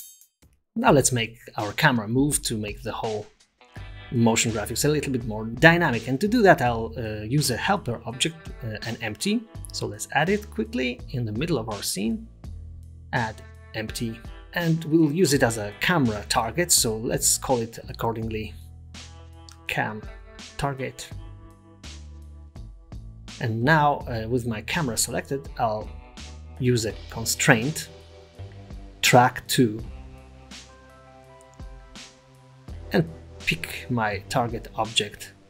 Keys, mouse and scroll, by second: 0.4 click, 0.4-0.9 scroll up 4, 1.0-1.3 scroll down 5, 1.3 middle click, 1.9-2.8 scroll down 4, 2.8-3.1 scroll up 2, 3.1 middle click, 5.4 shift+middle click, 5.6-6.1 shift+scroll up 2, 6.1 click, 8.9 shift+a, 14.3 middle click, 17.6 click, 19.4 click, 24.9 click, 25.8 click, 26.0 typing, 26.4-26.8 scroll down 10, 27.0 click, 27.4 click, 29.0 click.